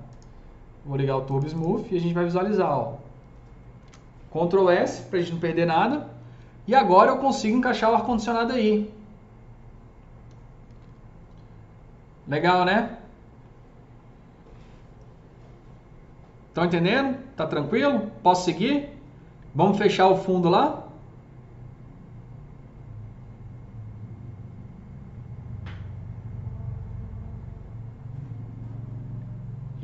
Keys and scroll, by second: 10.2 F3, 10.5 F3, 10.6 F4.